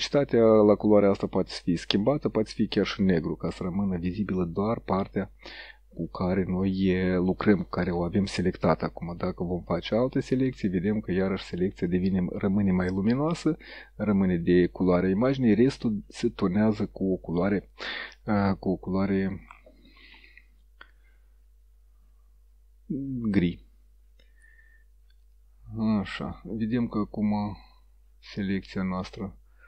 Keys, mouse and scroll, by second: 0.2-7.7 drag, 9.5 click, 11.4 click, 12.8 click, 14.2-15.1 drag, 15.7-16.5 drag, 25.3 click, 26.0-28.1 drag.